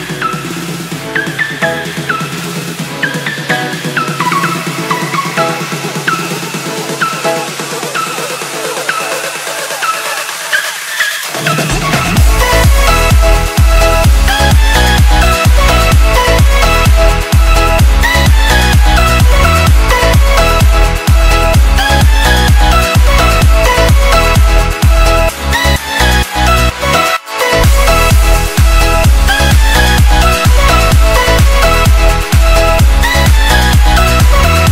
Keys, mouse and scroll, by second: 1.3 click, 4.5 Return, 5.5-6.1 alt+scroll down 1, 7.3 click, 7.7 Left, 13.7-14.2 alt+scroll down 2, 15.8 click, 30.5 click, 33.9 click.